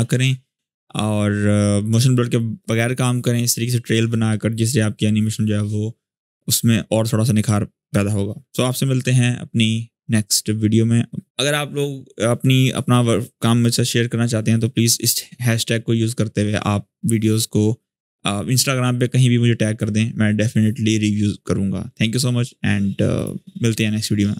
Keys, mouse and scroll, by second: 22.9 click.